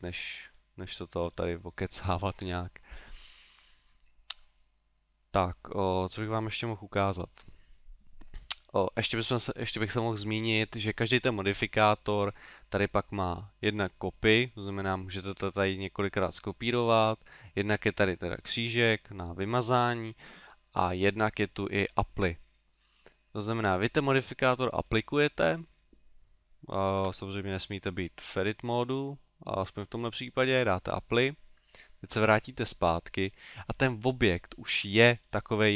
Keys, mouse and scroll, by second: 11.8 click, 14.4 click, 18.4 click, 24.8 click, 27.1 Tab, 30.6 click, 32.1 Tab, 32.9 middle click, 35.2 middle click.